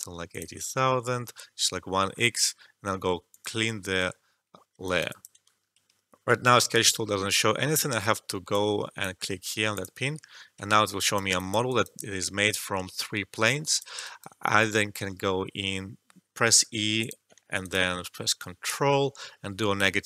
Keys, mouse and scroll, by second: 2.5 alt+middle click, 3.3 click, 5.0 alt+click, 8.4 click, 10.7 alt+right click, 11.3 alt+click, 11.6 alt+right click, 11.9-14.0 alt+drag, 14.0 alt+shift+right click, 14.9 e, 16.9 click, 17.4 alt+middle click, 17.5 alt+right click, 18.3-20.0 ctrl+drag.